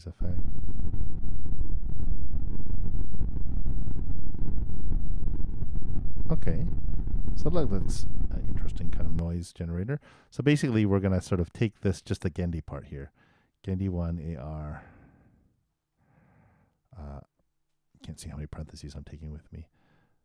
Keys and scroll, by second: 0.1 super+Return, 9.1 super+., 18.0 super+c.